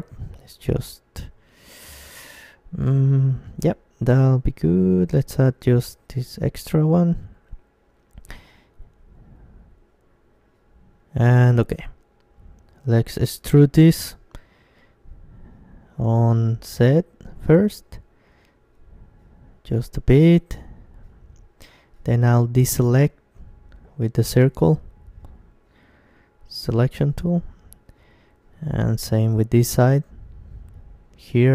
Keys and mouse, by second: 3.4-8.3 middle drag, 5.8-7.5 right drag, 8.3 KP_1, 10.2-12.3 middle drag, 12.3 e, 12.5-14.3 drag, 12.9 s, 19.5-21.4 drag, 20.7 c.